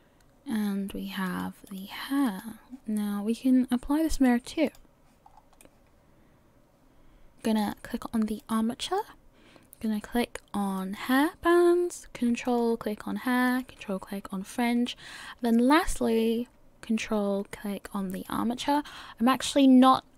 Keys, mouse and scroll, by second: 1.7 click, 2.2 click, 5.3 scroll down 2, 5.6 middle click, 7.6 click, 8.4 click, 12.4 ctrl+click, 13.5 ctrl+click, 18.1 ctrl+click.